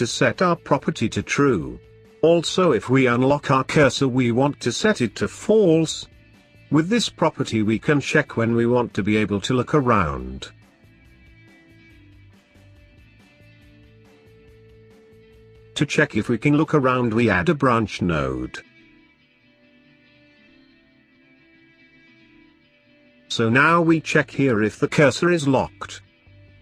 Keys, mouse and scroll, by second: 0.2 click, 2.2 click, 2.7 middle click, 3.6 click, 4.6 shift+click, 4.9 shift+d, 7.0 click, 7.8-10.1 drag, 10.8-11.2 scroll down 6, 11.2-12.4 middle drag, 12.4 scroll down 2, 12.5 middle click, 13.3-14.1 scroll up 10, 14.1-15.2 middle drag, 15.2 shift+a, 20.5 ctrl+right click, 21.4-22.8 drag, 25.7-26.6 drag.